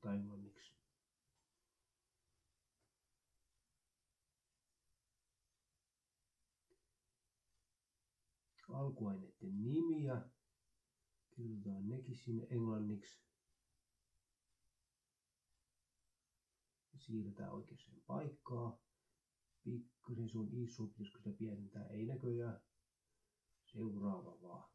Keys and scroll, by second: 0.6-4.1 typing, 3.2 ctrl+Right, 10.0-13.3 typing, 14.5 ctrl+Left, 15.1 Delete.